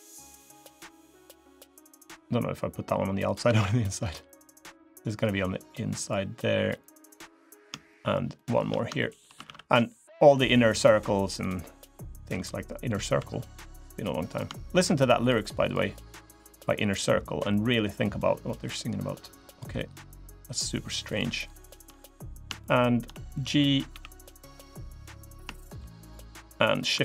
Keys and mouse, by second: 3.3 ctrl+r, 6.9 click, 7.6 shift+click, 8.1 shift+click, 8.7 shift+click, 9.2 ctrl+r, 12.9 3, 14.1 click, 15.0 shift+click, 15.4 shift+click, 17.2 shift+click, 17.7 shift+click, 18.2 shift+click, 19.7 shift+click, 20.9 shift+click, 22.4 shift+click, 23.7 g, 25.3 click, 25.3 shift+middle click.